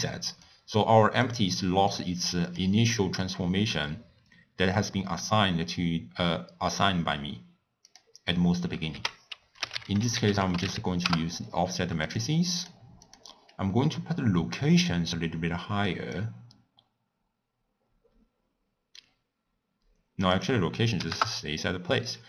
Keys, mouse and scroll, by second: 0.4 click, 2.5 click, 8.0 click, 11.3 f, 13.3 click, 16.5-19.3 drag, 21.2-22.2 drag.